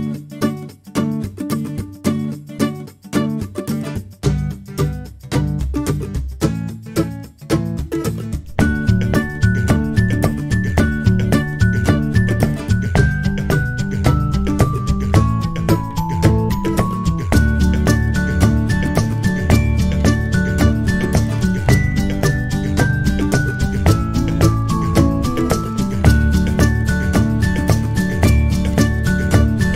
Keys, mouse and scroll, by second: 8.3 space, 11.5 click, 12.2 shift+a, 14.8 alt+click, 16.3 Tab, 17.8-22.2 typing, 22.8 click, 24.4 alt+click, 25.7 click, 26.0 click, 26.7 click.